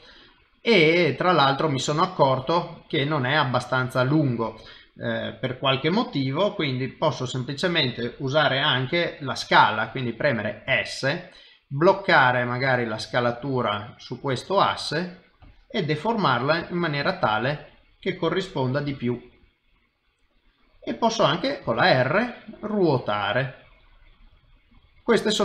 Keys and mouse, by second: 2.8 middle click, 17.3 KP_3, 18.9 g, 21.6 r.